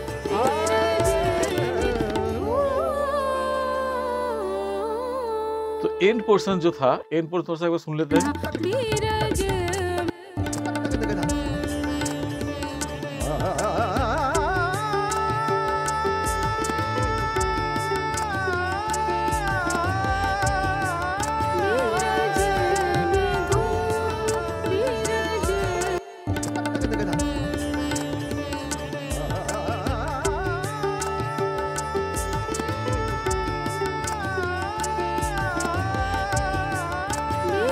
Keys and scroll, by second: 6.0 ctrl+=, 10.0 space, 11.1 ctrl+=, 25.9 space.